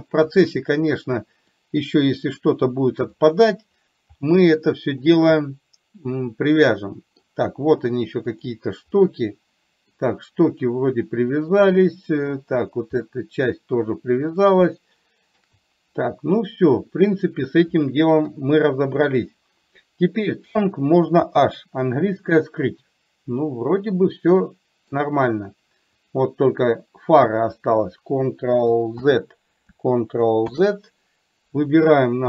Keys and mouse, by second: 0.4 click, 1.7 middle click, 2.5 click, 3.1 click, 4.4 middle click, 5.5-7.3 middle drag, 8.3 click, 9.1-10.1 middle drag, 11.7 middle click, 12.4 click, 13.1-14.4 middle drag, 14.8-15.4 shift+middle drag, 18.4 KP_3, 21.3 h, 22.0-25.0 middle drag, 26.0 click, 29.0 ctrl+z.